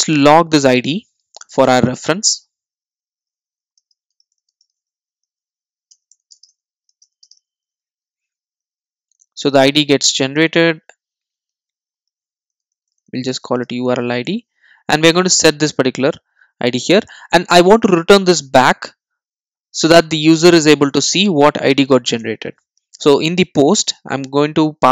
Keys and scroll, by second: 1.7 Tab, 9.9 super+s, 14.6 super+s, 22.2 Return.